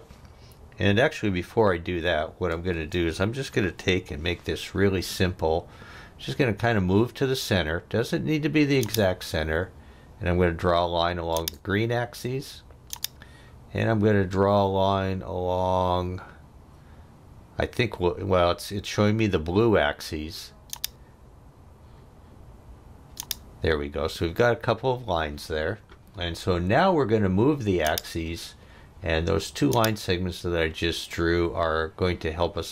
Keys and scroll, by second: 1.9 Escape, 2.6 space, 3.9 l, 24.9 Escape.